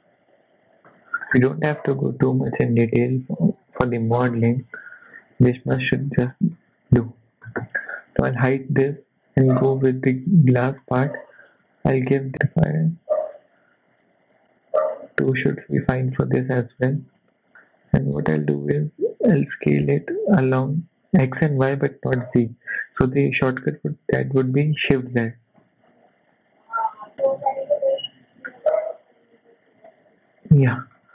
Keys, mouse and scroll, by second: 0.3 KP_1, 0.9 shift+middle click, 1.2-1.8 scroll up 3, 5.0-5.9 scroll down 1, 5.9 n, 6.2 scroll up 3, 6.5 shift+middle click, 8.8 click, 10.2 click, 10.6-11.1 scroll up 3, 10.8 shift+middle click, 11.4 click, 12.2 click, 12.3 click, 15.3 click, 15.8 Tab, 16.8 shift+middle click, 17.5 scroll up 1, 17.8 Tab, 19.0 s, 31.0 shift+middle click.